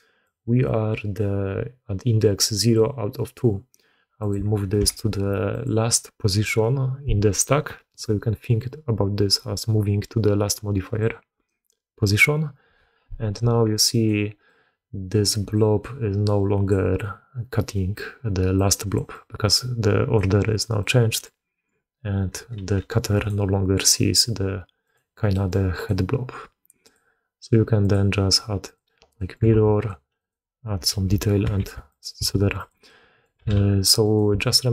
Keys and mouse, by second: 13.8 click, 14.3-15.1 drag, 15.3-18.4 d, 15.4-16.6 drag, 18.4 click, 18.9 d, 19.0-20.0 drag, 19.0 d, 20.0 d, 20.1 d, 20.6-21.1 drag, 22.4 g, 24.7 click, 25.2 click, 25.6 click, 26.8-28.6 drag, 29.0 click, 29.0 middle click, 29.0 right click, 29.4 alt+a, 29.6 click, 30.0 click, 30.8 KP_3, 31.5 shift+d, 32.0 s, 32.7-33.1 drag, 33.2 g, 34.2 s.